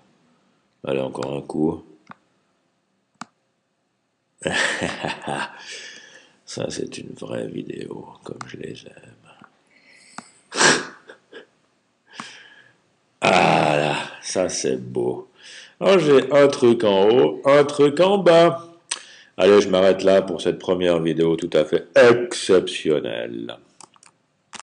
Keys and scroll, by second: 5.7 super+z.